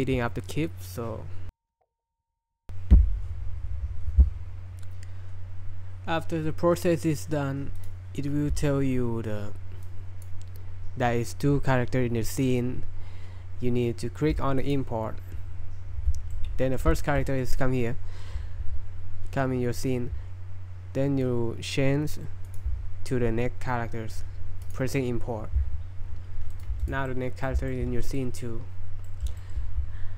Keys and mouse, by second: 9.8 click, 16.3-16.7 middle drag, 17.0 shift+middle drag, 22.4 click, 24.6-25.8 drag, 26.5 right click, 26.9 typing, 27.0-27.4 middle drag, 27.7-28.0 shift+middle drag, 28.1 middle click, 29.0 middle click, 29.4 shift+middle click.